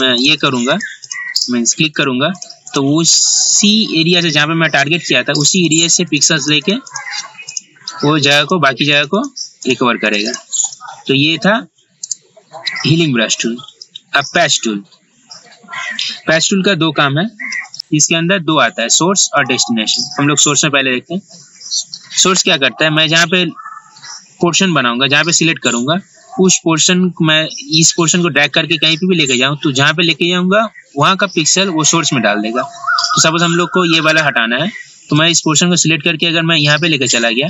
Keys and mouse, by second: 12.1 right click, 14.4 click, 17.7 ctrl+z, 17.7 click, 19.5-26.1 drag, 35.4-37.4 drag.